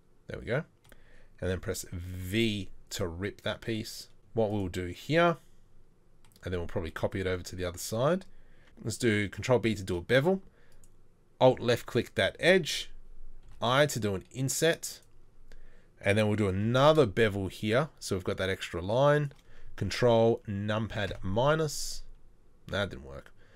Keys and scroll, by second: 2.2 v, 8.6 ctrl+z, 8.6 ctrl+b, 13.4 i, 16.6 ctrl+b.